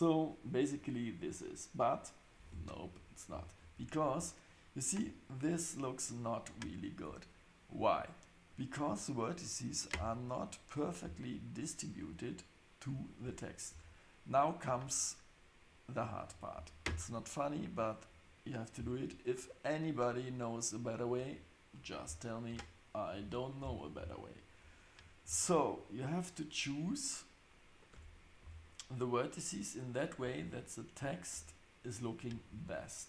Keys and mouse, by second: 2.5 space, 3.3 shift+Right, 8.5 click, 9.6 click, 10.7 click, 13.2 Tab, 13.7 Tab, 16.1 click, 16.6 click, 21.1 click, 21.7 click, 22.5 Tab, 23.2 Tab, 27.9 Tab, 28.4 Tab, 31.3 Tab, 32.5 Tab.